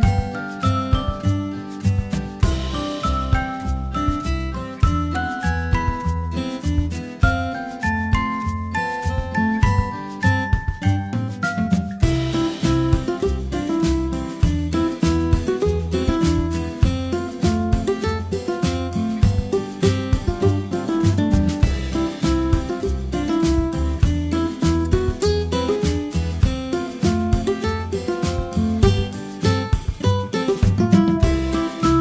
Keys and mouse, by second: 14.0-14.4 middle drag, 15.7-17.1 drag, 17.9-18.7 middle drag, 19.3 g, 30.6 g.